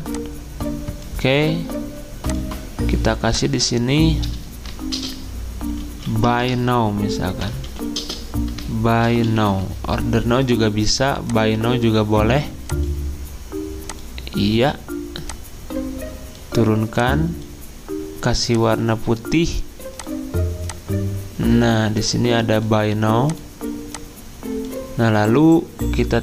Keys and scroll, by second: 4.9-10.0 typing.